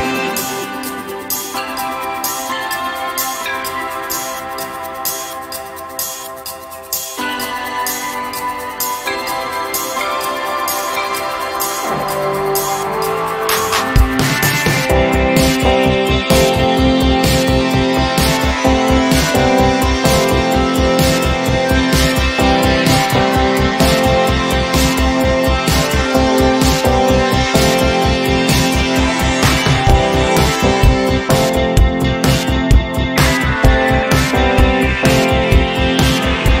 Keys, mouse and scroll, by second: 1.2 space, 1.6 click, 1.7 space, 2.6 click, 3.7 z, 4.8-5.7 alt+drag, 6.2 b, 8.1 p, 9.2 alt+scroll down 1, 10.2 click, 22.2 v, 25.4 click, 26.1 ctrl+c, 26.9 click, 27.5 ctrl+shift+v, 28.4 click, 29.5-30.1 drag, 33.1-33.8 ctrl+scroll down 2, 34.2-34.8 ctrl+scroll down 1, 36.3 z.